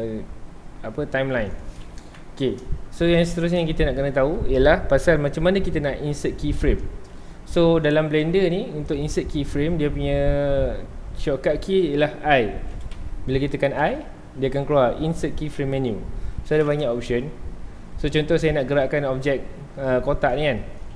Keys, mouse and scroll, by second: 2.1 shift+Left, 3.1 scroll down 2, 3.3-3.8 shift+middle drag, 3.8-4.2 scroll up 2, 4.2-7.7 middle drag, 7.7 scroll down 2, 7.9 shift+middle click, 8.3 scroll up 1, 9.2-12.3 shift+middle drag, 13.8 i, 17.9 scroll down 1, 18.1-18.4 middle drag, 18.4 scroll up 1, 18.5 scroll down 1, 18.7-19.1 middle drag, 19.1 scroll down 1, 19.1-19.5 scroll up 1, 19.8-20.9 middle drag.